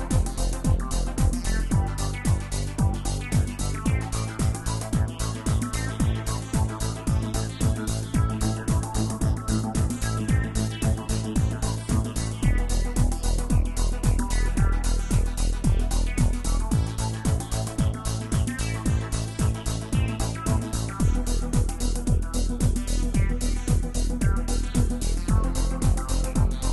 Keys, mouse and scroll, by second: 3.7-7.0 scroll down 6, 7.0-7.6 scroll down 1, 7.6-8.2 scroll down 1, 8.2-10.0 scroll down 1, 10.0-10.6 scroll down 1, 10.6-11.0 scroll down 1, 11.0-13.1 drag, 13.1-14.2 scroll down 4, 14.2-14.8 scroll down 1, 14.8 scroll down 1, 15.0-15.3 drag, 15.3 scroll down 4, 16.4-19.4 drag, 19.7 scroll down 3, 20.4-23.5 drag, 24.4-25.9 drag, 26.3 click.